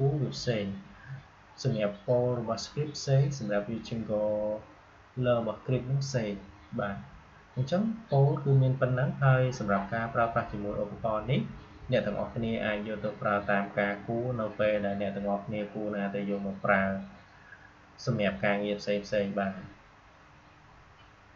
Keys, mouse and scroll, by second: 21.3 click.